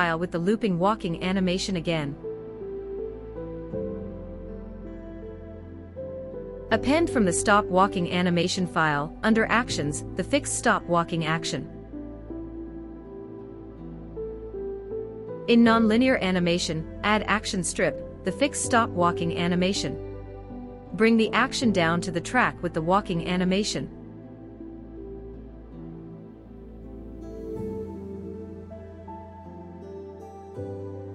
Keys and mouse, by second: 5.6-6.4 drag, 16.3 click, 17.7-18.1 drag, 18.7 click, 20.7 click, 22.4 click, 30.8 space.